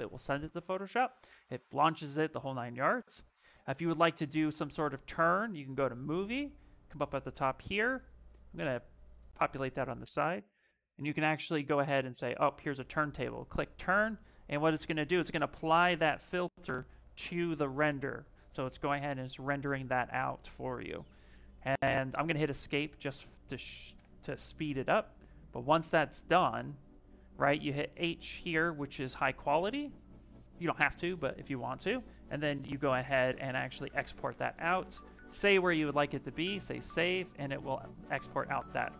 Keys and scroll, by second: 22.0 Escape, 22.7 Escape, 22.9 Escape, 23.7 shift+r, 29.7 shift+m.